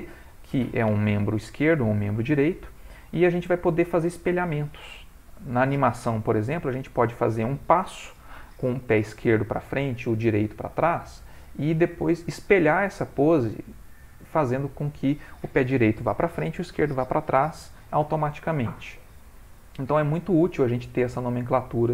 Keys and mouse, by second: 3.2 ctrl+middle click.